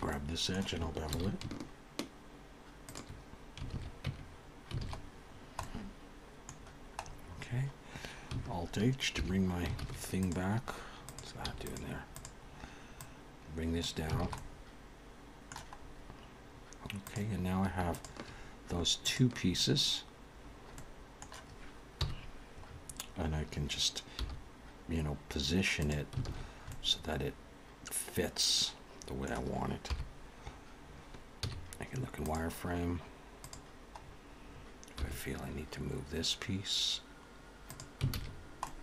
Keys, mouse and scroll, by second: 0.1 middle click, 1.2 ctrl+b, 3.7 alt+a, 4.1 Tab, 4.3-5.6 scroll down 5, 4.8 alt+a, 5.6 middle click, 6.6-7.8 scroll down 7, 7.9-8.3 scroll up 3, 9.2 alt+h, 9.8 alt+a, 10.2 click, 11.0 scroll down 1, 11.1 click, 11.5 x, 12.1 click, 13.0 click, 14.2 alt+a, 14.3 middle click, 15.8-17.0 scroll up 4, 17.0 click, 17.0 scroll up 1, 17.9 shift+click, 19.0 click, 20.5-21.1 scroll down 2, 20.8 middle click, 22.0 KP_1, 22.7-23.5 scroll up 4, 24.2 g, 26.3 alt+a, 26.4-26.7 scroll down 3, 26.7 middle click, 29.8 KP_7, 31.3 z, 33.4 click, 34.0-35.4 scroll up 4, 35.0 g, 38.1 alt+a, 38.3-38.7 scroll down 4, 38.5 middle click.